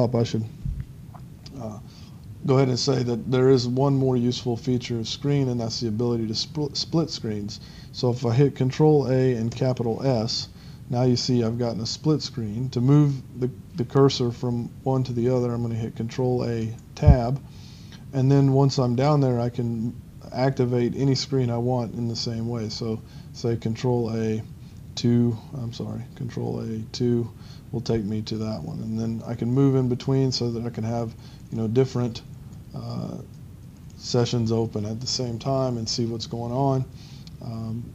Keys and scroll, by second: 9.3-10.1 typing, 16.7 Tab, 24.2 ctrl+n, 24.3-29.7 typing, 29.3 Tab, 31.2-32.6 typing, 33.1 Tab.